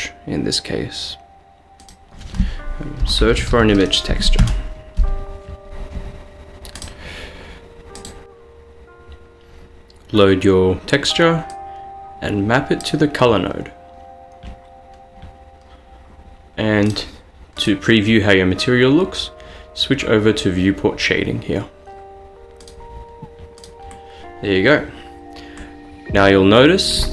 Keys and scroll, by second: 3.1-3.7 typing, 4.5 Return, 5.9-6.6 typing.